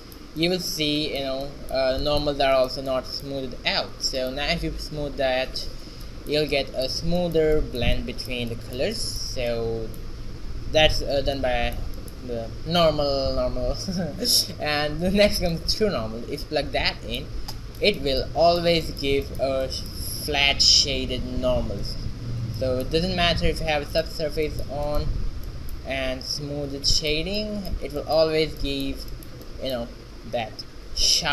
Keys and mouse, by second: 3.0 z, 4.3 click, 9.8 middle click, 12.4-14.1 middle drag, 14.1-16.4 drag, 22.6-24.5 drag, 23.4-24.5 right drag, 24.5 z.